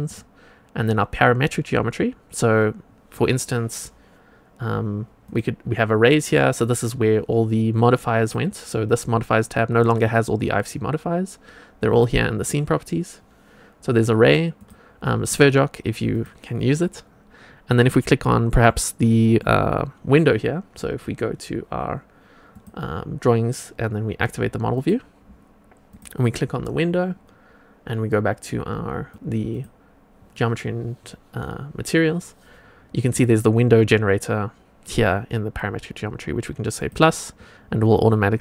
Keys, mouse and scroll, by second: 0.0 click, 5.2 click, 8.1 click, 11.8 click, 14.5 click, 15.2 click, 16.0 click, 17.7 click, 18.2-18.6 scroll up 1, 18.6-19.3 middle drag, 22.5 click, 24.7 click, 25.8 click, 29.0 click, 29.4 click, 33.0 click, 36.7 click.